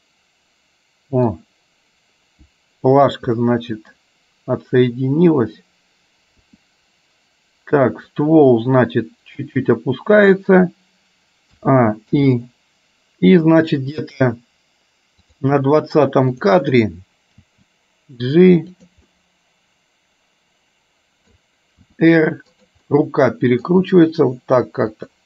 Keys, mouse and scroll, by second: 3.6 middle click, 6.4 r, 11.7 a, 12.3 i, 15.6 click, 16.4 click, 17.4 g, 19.2-21.3 middle drag, 21.9 r, 22.9 middle click, 23.9 r.